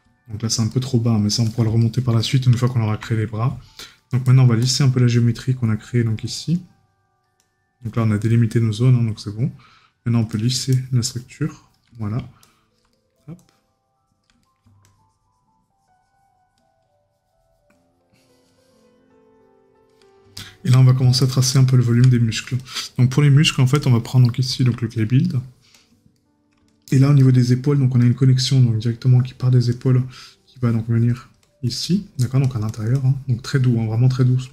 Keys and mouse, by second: 1.8 right click, 11.9 right click, 14.4 right click, 20.8 right click, 25.2 right click.